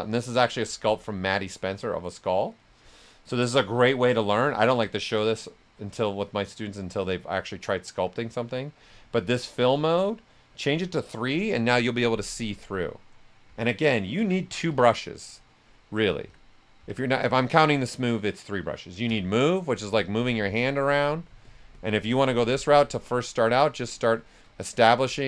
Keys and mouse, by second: 3.0 click, 3.1 click, 9.9-11.5 drag, 11.5-13.4 right drag, 13.2-15.1 typing, 14.7-16.2 drag, 16.2 s, 16.3 click, 16.7 x, 17.4 click, 19.0 s, 19.1 click, 23.9 right click, 24.6 click.